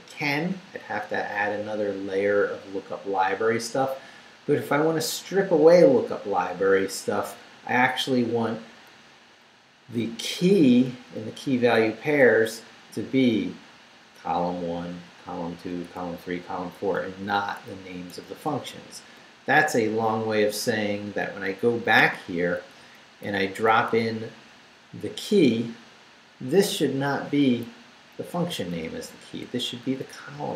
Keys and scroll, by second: 8.1 Right, 10.9 Right, 14.7 Right, 19.3 Right, 22.8 Down, 23.7 Right, 28.2 Right.